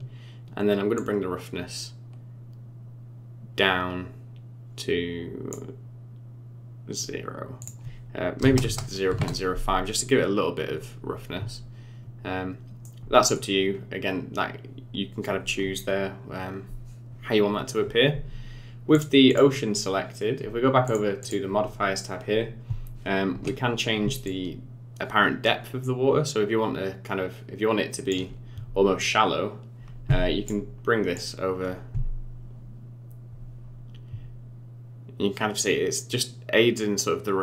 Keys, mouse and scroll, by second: 0.9 click, 7.6 click, 12.5 scroll down 2, 12.8 middle click, 13.7-15.5 scroll up 1, 18.9 click, 19.2 click, 20.8 click, 21.2 click, 21.6-23.9 scroll up 5, 24.2 shift+click, 29.0 click, 31.1 click.